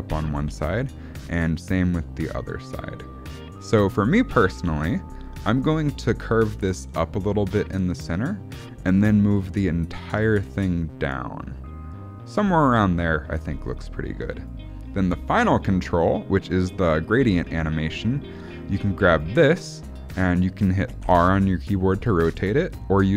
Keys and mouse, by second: 0.4 ctrl+z, 0.7 click, 1.4-4.2 drag, 4.6 ctrl+z, 5.5 click, 6.4-8.6 drag, 9.3 click, 10.2-14.4 drag, 20.9 r.